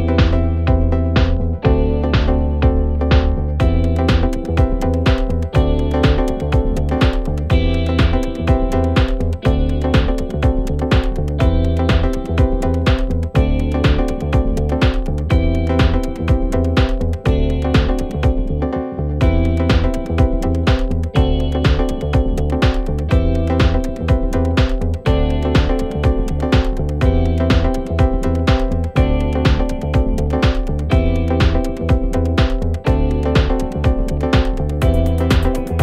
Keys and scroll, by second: 5.1 4, 15.8 3, 16.2 ], 20.8 ].